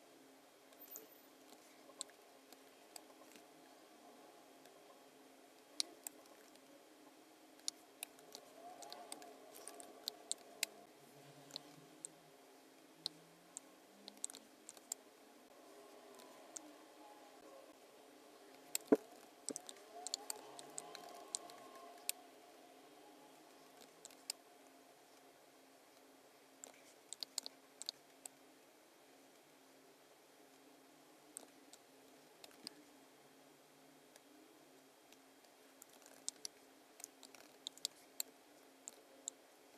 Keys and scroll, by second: 2.5 space, 3.3 v, 5.7 space, 6.5 v, 7.6 space, 8.9 space, 9.7 b, 10.4 space, 14.7 space, 18.5 space, 19.3 super+-, 20.1 space, 21.4 space, 24.1 space, 27.2 space, 27.8 space, 31.7 z, 32.0 space, 32.6 v, 35.1 v, 36.4 space, 37.6 super+=, 37.8 space.